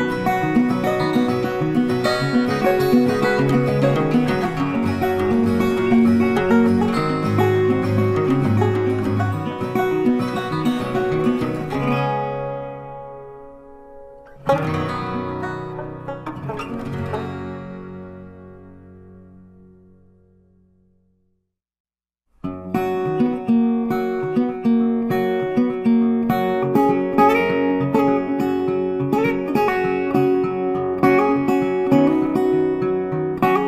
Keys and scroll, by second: 4.0 ctrl+t, 26.4 ctrl+t.